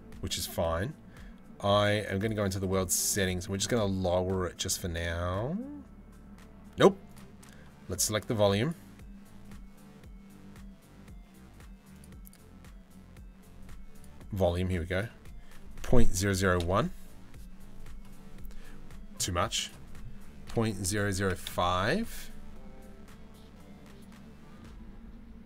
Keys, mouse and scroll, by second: 1.8 click, 11.5 click, 11.8 click, 13.5 click, 14.6-15.8 drag, 15.8 KP_0, 19.2-20.6 middle drag, 20.6 KP_0.